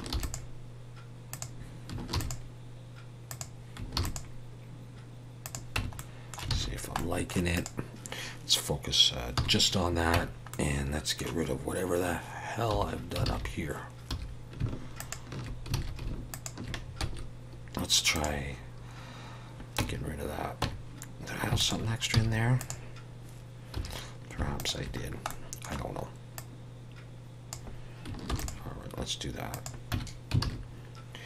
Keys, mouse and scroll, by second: 0.1 ctrl+r, 5.8 Tab, 5.9 middle click, 6.5 alt+a, 6.7 scroll down 1, 6.9 middle click, 7.5 click, 9.4 /, 10.1 Tab, 10.5 middle click, 12.7 2, 13.2 alt+a, 14.1 2, 15.0 alt+shift+click, 15.7 alt+a, 16.3 alt+shift+click, 17.0 x, 19.8 Tab, 21.6 alt+shift+click, 22.1 x, 23.8 2, 24.6 alt+shift+click, 25.0-26.1 scroll down 2, 25.3 middle click, 26.3 click, 28.3 ctrl+r, 29.9 Tab, 30.4 alt+a.